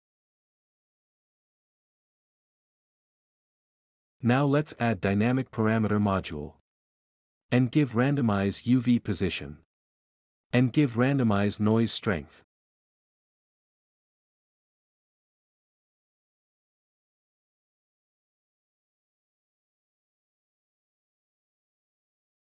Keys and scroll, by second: 6.2-7.2 typing, 8.6-9.6 typing, 11.0-14.5 typing, 16.0 ctrl+c, 16.6 ctrl+v.